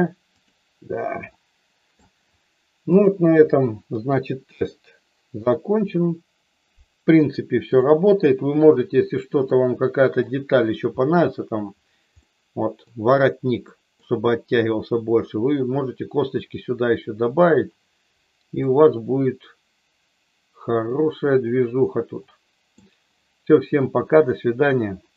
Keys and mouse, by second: 0.3 click, 1.3 shift+middle click, 2.8 click, 3.8 KP_1, 5.8 KP_3, 9.4 middle click, 12.2 middle click, 13.6 middle click, 18.6-22.7 middle drag.